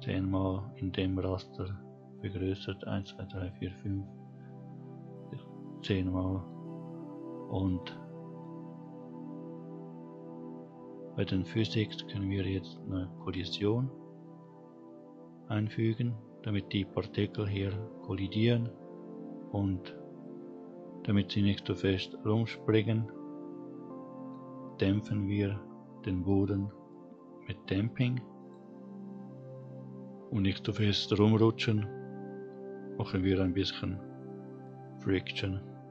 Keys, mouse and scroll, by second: 5.4-6.7 scroll up 3, 6.7-7.1 middle drag, 10.4 click, 11.9 click, 25.6-27.2 drag, 33.3-35.1 drag.